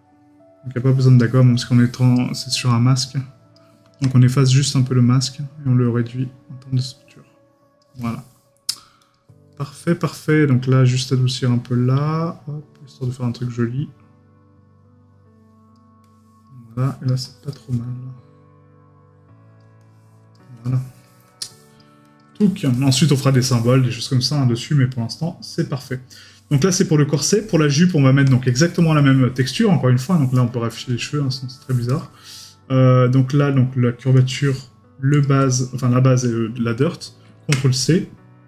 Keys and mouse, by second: 9.5 middle click, 20.6 right click, 22.4 right click, 22.9 middle click, 27.9 right click, 29.0 middle click, 31.9 right click.